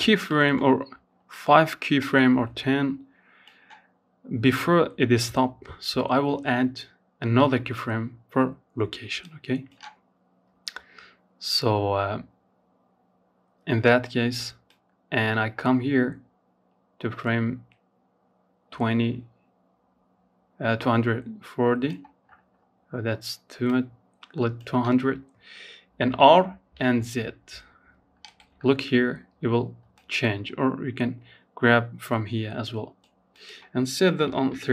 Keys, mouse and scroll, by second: 12.9-16.0 drag, 20.4-21.9 scroll down 7, 21.9-24.3 drag, 24.3 r, 28.1-31.2 drag, 31.5-34.7 drag.